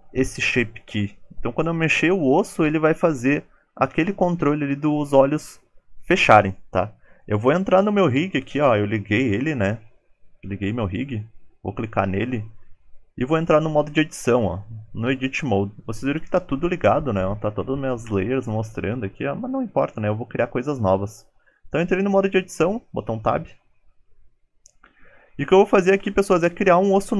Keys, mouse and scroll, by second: 13.8-14.6 scroll down 2, 14.0 middle click, 25.4 middle click, 25.4-25.9 scroll down 4, 26.3-26.7 scroll down 3.